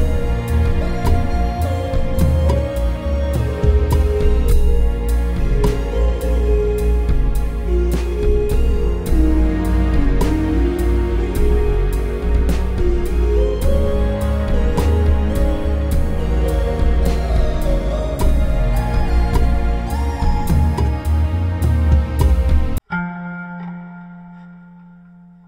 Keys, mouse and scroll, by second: 11.0 KP_7, 13.0 space, 15.6 shift+c, 17.1 KP_5, 17.9 space, 22.2 Tab, 23.4 s.